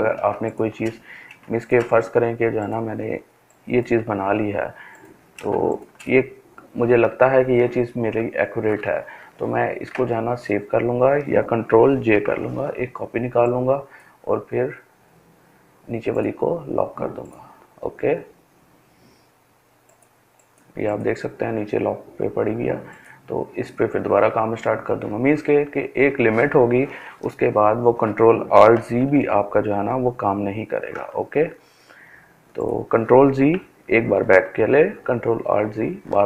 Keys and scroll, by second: 10.8 ctrl+j, 27.7 ctrl+alt+z, 28.6 ctrl+alt+z, 32.8 ctrl+z.